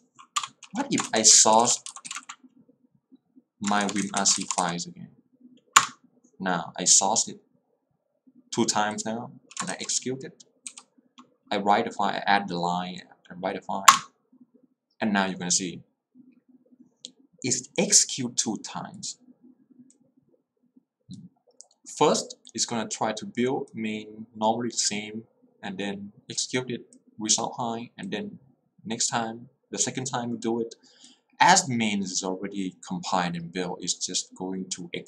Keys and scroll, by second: 0.4 Return, 1.1-6.1 typing, 5.9 Return, 9.1-10.7 typing, 14.0 Return, 14.2 o, 18.0 o.